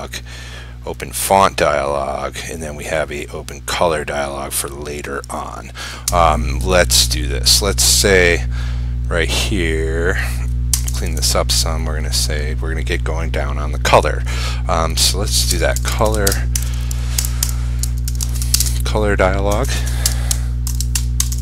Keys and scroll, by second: 16.4 ctrl+space.